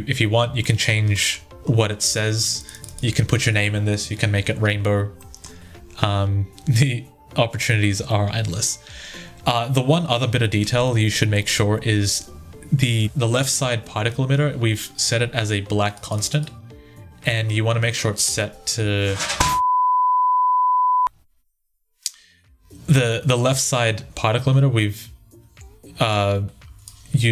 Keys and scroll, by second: 27.2 ctrl+z.